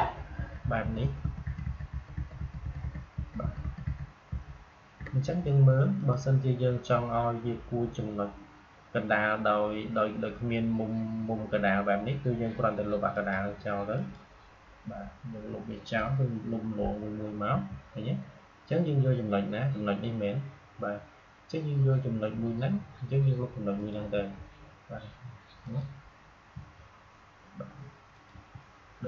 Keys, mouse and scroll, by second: 5.9 click, 13.0 click, 17.4 Delete, 23.7 click, 24.0 Delete, 25.5 click, 26.4 Delete, 28.0 click, 28.2 Delete.